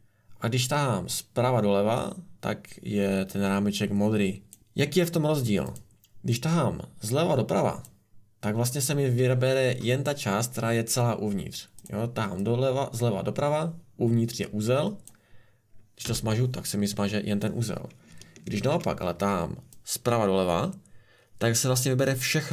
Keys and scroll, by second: 16.0 Delete, 18.5 ctrl+z.